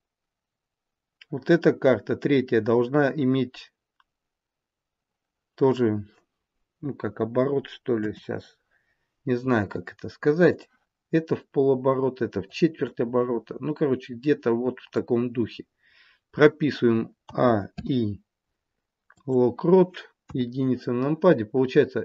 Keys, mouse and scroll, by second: 7.9 KP_7, 10.5 click, 12.3 click, 17.1 a, 17.6 i, 20.2 KP_1.